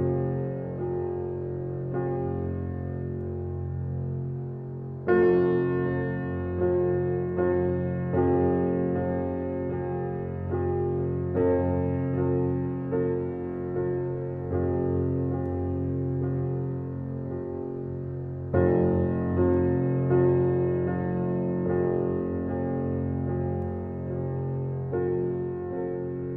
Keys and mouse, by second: 1.4 click, 2.0 click, 2.4 click, 3.2 ctrl+z, 4.9-6.9 drag, 8.0 ctrl+z, 9.2-10.8 drag, 11.1-13.3 drag, 13.4 ctrl+z, 14.2 ctrl+z, 15.2-17.7 drag.